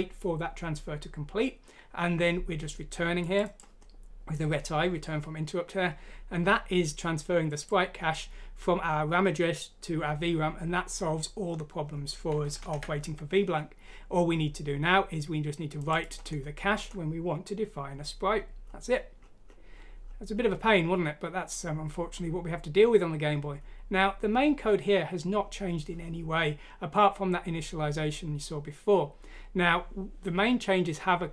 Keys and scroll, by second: 12.6 ctrl+Home.